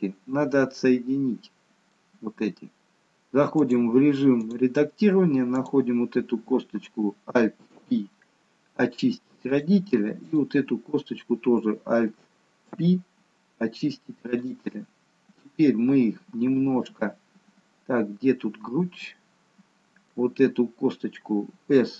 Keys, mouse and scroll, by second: 0.8 middle click, 3.7 click, 5.6 click, 7.8 alt+p, 10.3 click, 12.7 alt+p, 15.4 middle click.